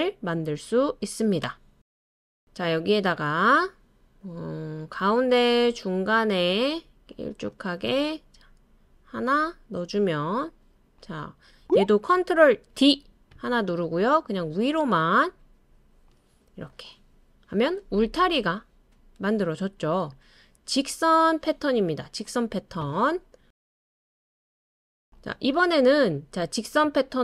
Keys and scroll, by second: 12.7 super+d.